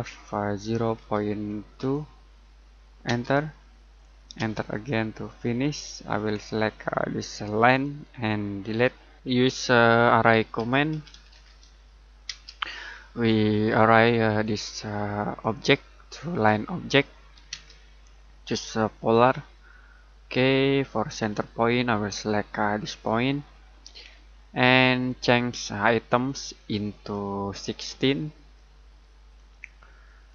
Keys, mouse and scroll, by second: 0.6-3.0 typing, 5.6-7.1 scroll up 1, 7.1 click, 8.6 Delete, 9.3-9.8 scroll down 1, 10.1 middle click, 10.3-12.2 typing, 12.9-13.3 scroll down 1, 13.3 middle click, 14.4 click, 17.5 space, 19.1 click, 20.3 scroll down 1, 20.4 middle click, 21.0-22.8 scroll up 1, 22.8 click, 23.5-24.3 scroll down 1, 24.3 middle click, 26.2 click, 27.8-28.4 typing, 29.3 click.